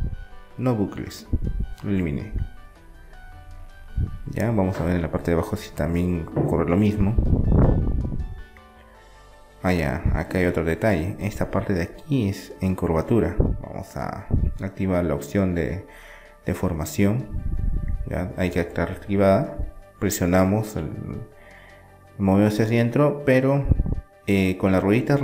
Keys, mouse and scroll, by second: 2.5 Tab, 2.7 middle click, 3.6-7.6 middle drag, 7.6-9.4 right drag, 8.3 Tab, 11.4 middle click, 12.4-14.1 right drag, 14.1 middle click, 15.0-16.7 drag, 17.4 KP_7, 19.4-21.2 drag.